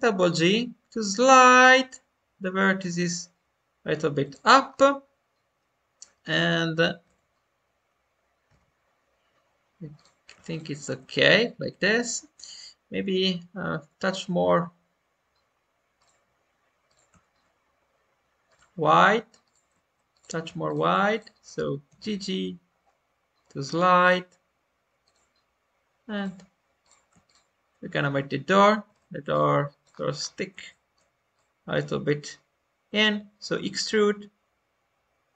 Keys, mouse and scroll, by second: 4.6-6.1 scroll down 1, 6.2 click, 8.5 click, 9.9-12.9 drag, 14.0-21.8 drag, 21.8 g, 26.1-28.0 drag, 28.9 shift+click, 29.2 middle click, 29.8-30.3 scroll down 2, 30.6-32.8 shift+middle drag, 32.8 e.